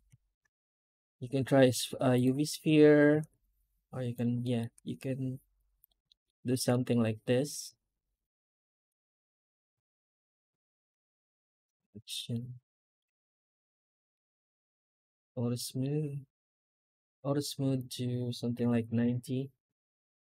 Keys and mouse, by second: 2.5 Tab, 4.3 middle click, 5.9 middle click, 9.6 s, 11.6 Tab, 11.9 click, 12.2-12.8 middle drag, 14.6 ctrl+shift+x, 15.5 middle click, 20.2 right click.